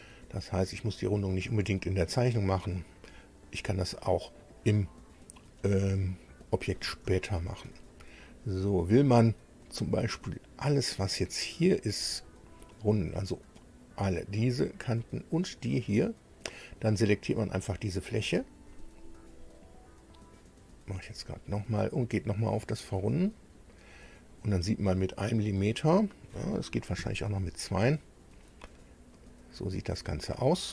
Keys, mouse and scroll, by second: 7.2 shift+middle click, 8.1 middle click, 12.0 click, 19.6 click, 21.1 click, 23.0 click, 27.0 KP_2, 27.2 Tab, 29.0 scroll up 2, 29.1-30.7 drag.